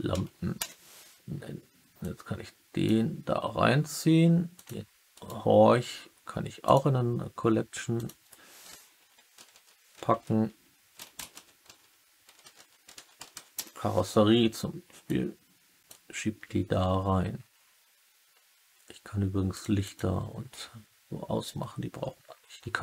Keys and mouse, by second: 1.9-2.8 drag, 4.5 click, 5.1-6.7 right drag, 9.3-10.0 typing, 12.5 s, 15.0-15.8 drag, 19.4 click, 19.7 click.